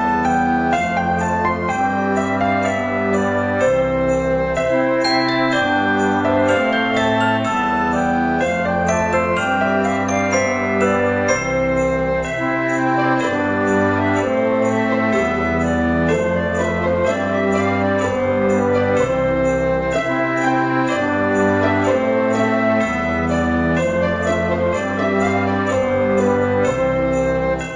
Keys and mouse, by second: 1.8 click, 3.4 click, 6.7 Tab, 7.4 s, 9.3 click, 9.8 g, 10.0 x, 11.0 click, 11.5 KP_1, 12.6 g, 13.3 click, 13.6 r, 14.9 click, 15.5 Tab, 15.7 middle click, 18.4 click, 19.8 click, 21.3 KP_1, 22.3 g, 22.4 x, 22.9 right click, 23.0 Tab, 23.8 g, 24.0 x, 25.1 right click, 25.5 a, 26.1 g, 26.3 x.